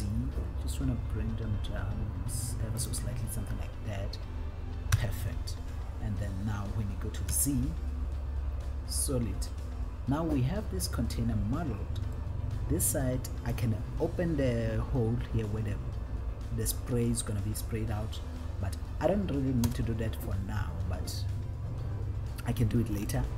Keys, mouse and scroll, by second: 0.5 z, 3.1 click, 5.2 Tab, 6.5-7.7 scroll down 1, 7.7 z, 10.2-11.6 scroll down 4, 12.4-14.0 middle drag, 14.3-15.9 scroll up 2, 19.9 KP_1, 21.0-22.1 scroll down 3.